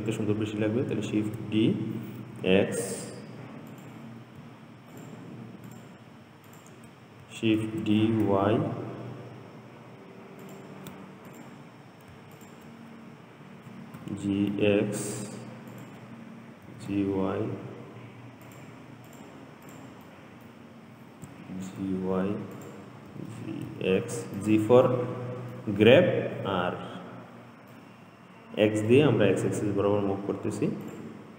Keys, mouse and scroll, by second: 1.4 shift+d, 5.2 shift+click, 5.9 shift+click, 6.7 shift+click, 7.8 shift+d, 11.5 click, 12.6 shift+click, 14.2 g, 16.9 g, 19.3 click, 19.9 click, 20.4-21.5 middle drag, 21.5 g, 23.4 g, 25.1-26.1 middle drag, 26.1-26.8 scroll up 3, 27.9-31.0 middle drag, 31.1 click.